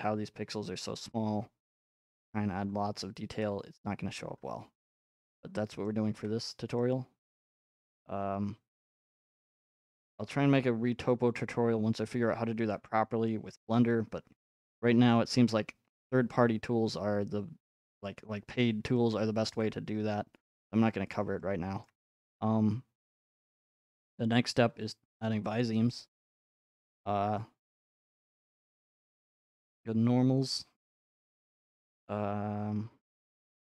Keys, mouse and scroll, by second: 2.3 middle click, 2.7 middle click, 3.3 middle click, 3.6 middle click, 3.6 middle click, 3.6 middle click, 4.4-5.5 scroll, 6.4 middle click, 8.8 middle click, 10.1 shift+click, 10.3 middle click, 10.4 middle click, 10.6 middle click, 10.6 middle click, 11.2 middle click, 11.3 middle click, 11.4 scroll, 12.9-13.8 scroll, 14.1 ctrl+Tab, 18.0 middle click, 18.4 middle click, 19.6 shift+middle click, 20.9 middle click, 21.8 shift+middle click, 25.6 click, 29.8 click.